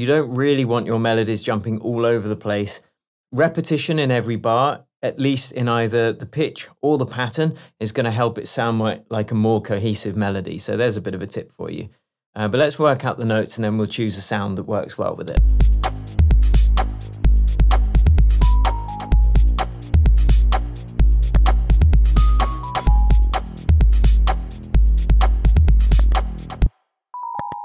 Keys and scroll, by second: 15.6 space, 26.7 space.